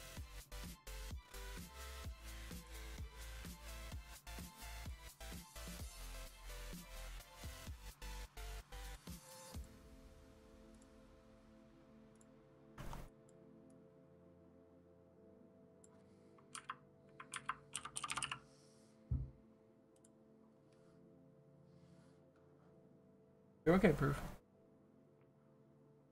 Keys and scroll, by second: 7.7 ctrl+z, 9.6 ctrl+z.